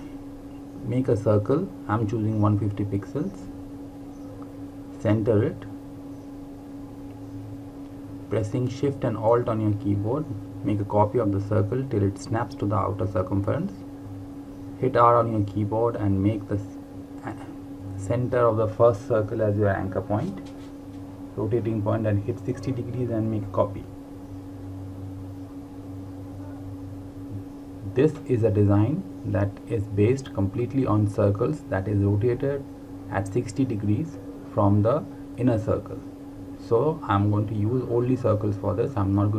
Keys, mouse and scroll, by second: 0.3 click, 2.6 KP_1, 2.8 KP_5, 3.1 KP_0, 3.6 KP_Enter, 5.6 click, 15.2 r, 17.9 alt+Num_Lock, 18.0 alt+click, 21.4 KP_6, 21.7 KP_0, 22.7 click, 24.8 ctrl+d, 25.2 ctrl+d, 26.2 typing, 27.9 typing, 29.7 click, 34.5 r, 36.7 alt+click.